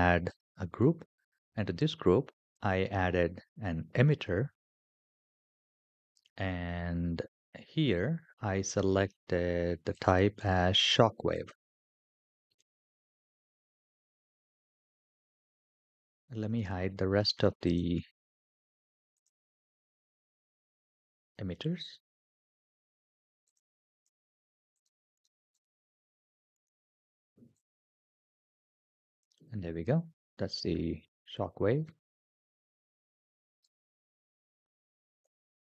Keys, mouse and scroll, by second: 2.3-4.6 drag, 4.6 typing, 9.0-9.7 scroll down 1, 9.7-11.3 drag, 12.3-13.8 scroll down 6, 16.3-17.5 scroll up 3, 17.5-19.0 drag, 17.5-18.9 scroll up 1, 21.8 click, 23.3 click, 23.7 click, 25.0 click, 25.3 click, 25.9 click, 26.3 click, 27.4 click, 29.3 scroll up 3, 33.4 g.